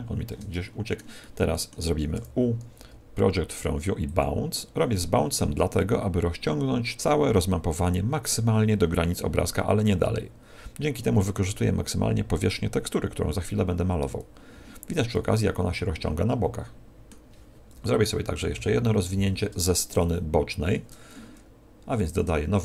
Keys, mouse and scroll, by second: 0.5 shift+middle click, 0.5 scroll down 3, 1.1 shift+middle click, 17.7 KP_1, 18.5 KP_3, 19.9 shift+middle click, 22.0 click.